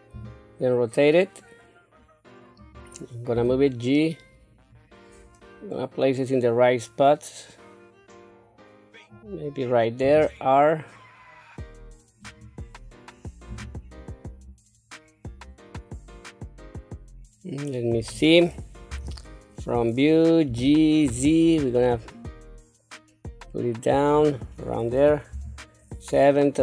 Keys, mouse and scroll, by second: 0.1 r, 3.3 g, 10.0 r, 13.5 g, 18.9 KP_1, 20.4 g, 25.3 KP_7.